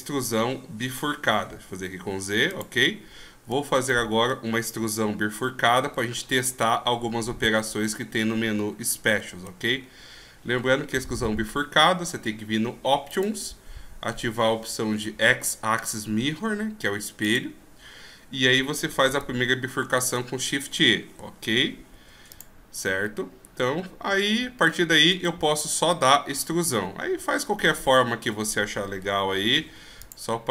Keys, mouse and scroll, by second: 0.8 e, 3.1 scroll down 1, 3.9 middle click, 3.9 scroll down 2, 4.8 KP_1, 6.1-7.2 shift+scroll up 9, 8.0 ctrl+scroll down 1, 8.5-9.6 ctrl+scroll up 5, 9.7-10.1 shift+scroll up 2, 10.1-11.2 shift+scroll down 1, 13.1 click, 17.2 click, 20.0 shift+e, 23.4 ctrl+scroll down 1, 25.1 right click, 28.2 e.